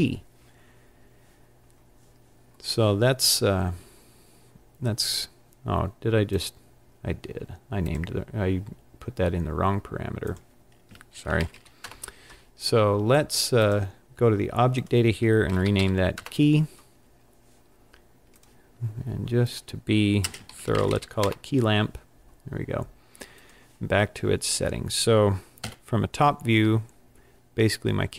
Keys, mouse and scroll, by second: 6.3 click, 7.8 click, 10.2 click, 11.8 click, 13.6 click, 14.7 click, 16.2 click, 18.3 click, 21.2 click, 23.4 click, 25.6 KP_7, 25.7 KP_7.